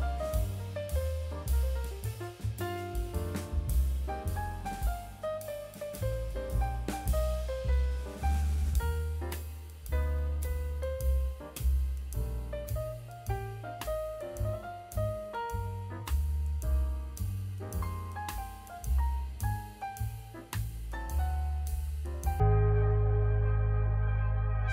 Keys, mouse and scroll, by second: 1.0 scroll down 1, 1.1-1.4 middle drag, 2.3-3.6 drag, 3.8 middle drag, 6.0 KP_7, 7.0 KP_Decimal, 8.0 s, 9.8 Tab, 10.1 scroll down 2, 10.3 middle click, 10.8 scroll down 2, 11.2 middle click, 11.7 Tab, 12.5-13.6 drag, 13.7-14.3 scroll down 1, 14.7-15.0 middle drag, 15.8 click, 16.3 Tab, 16.6 click, 17.5 3, 17.6 click, 18.5 e, 20.7 click, 22.5 scroll down 1, 22.8 middle click, 24.3 KP_1.